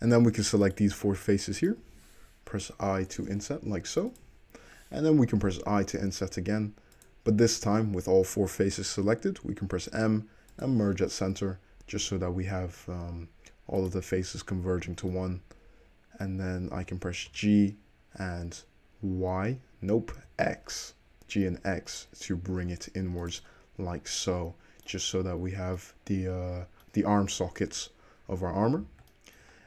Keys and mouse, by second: 0.0 middle click, 0.8 shift+click, 0.9 shift+middle click, 1.3 shift+click, 1.4 shift+middle click, 1.8 shift+click, 1.9-13.9 middle drag, 2.7 i, 5.5 i, 9.8 m, 13.0 1, 13.9 click, 14.0-17.4 middle drag, 17.4 g, 18.5-20.9 middle drag, 20.9 shift+click, 21.0-28.2 shift+middle drag, 23.9 Tab, 27.7 `, 28.4-29.6 middle drag.